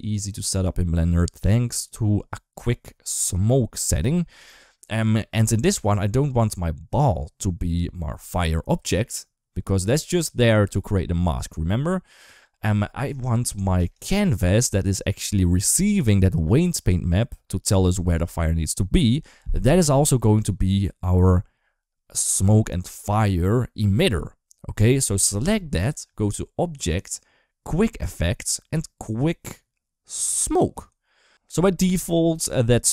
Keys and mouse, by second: 6.2 click, 13.7 click, 14.4 click, 26.7-30.6 drag.